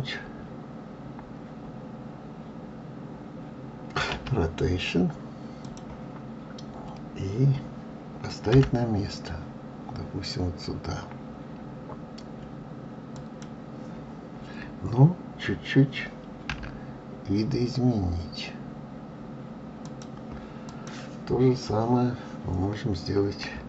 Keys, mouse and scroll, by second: 4.1 r, 20.7 click.